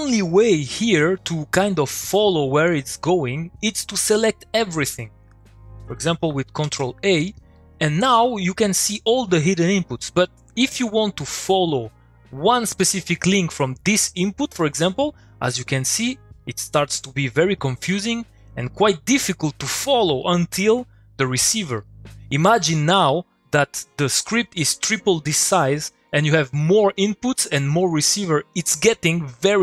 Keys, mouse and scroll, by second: 1.9 click, 5.0 click, 7.2 middle click, 7.3 click, 7.5 middle click, 8.3 click, 9.6 middle click, 10.7 click, 10.9 middle click, 13.0-13.6 middle click, 15.1 middle click, 21.9 click, 22.1 middle click, 22.9 click, 23.1 middle click.